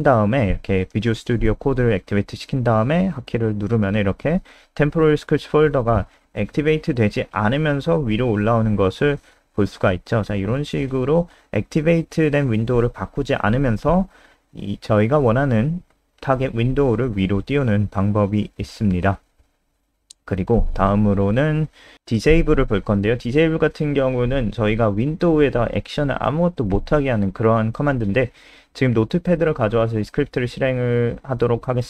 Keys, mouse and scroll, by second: 0.5 KP_0, 12.9-13.2 scroll up 3, 14.0 click, 15.8 Down, 16.3 scroll down 3, 17.0 shift+click, 17.0-17.6 scroll down 3, 17.6 Delete, 18.3 click, 18.8-19.6 scroll down 1, 19.6 click, 20.4 ctrl+c, 20.5 click, 20.7 scroll up 5, 21.4 ctrl+v, 21.6 scroll up 2, 21.7 ctrl+v, 21.9 ctrl+s, 22.7 click, 25.1-26.2 typing, 26.6 click, 27.0 ctrl+alt+space, 27.2 alt+click, 29.7 F5.